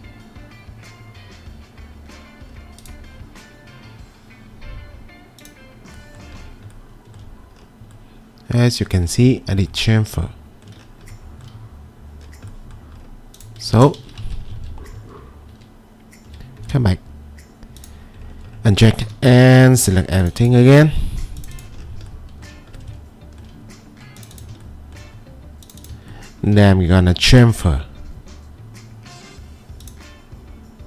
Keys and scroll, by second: 14.0 ctrl+z, 19.1 2.